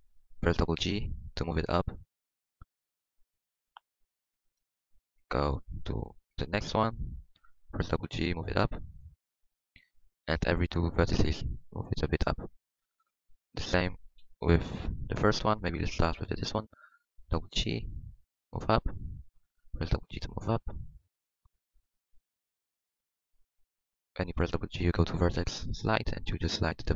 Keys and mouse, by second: 0.9 g, 7.8 g, 10.2 g, 12.0 g, 14.2 KP_1, 17.2 g, 19.8 g, 22.0 click, 22.0 g, 24.2 g.